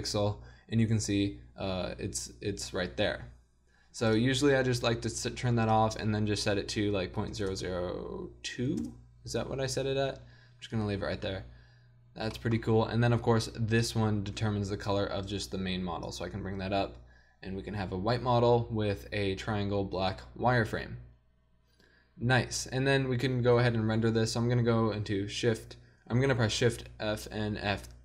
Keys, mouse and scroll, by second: 4.7-7.5 drag, 7.5 KP_0, 13.8-15.5 middle drag.